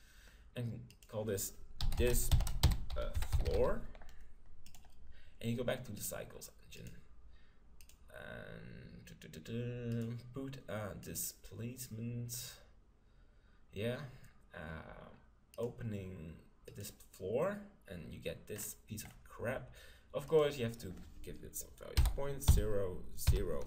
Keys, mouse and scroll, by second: 6.0-7.7 drag, 7.9-9.6 drag, 9.9-11.6 drag, 15.5-17.2 drag, 18.5-20.6 middle drag, 18.5-19.1 scroll down 1, 20.3-22.0 drag, 22.1 click.